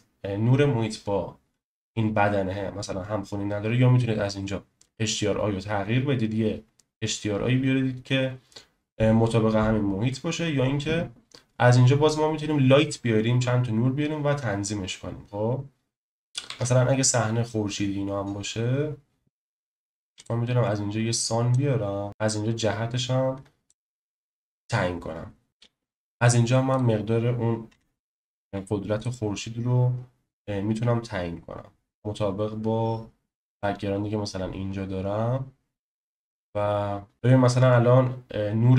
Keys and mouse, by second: 16.5 shift+a, 21.5 click, 25.5 ctrl+z, 26.8-29.0 drag, 28.4 0, 33.5 click, 37.1 ctrl+z.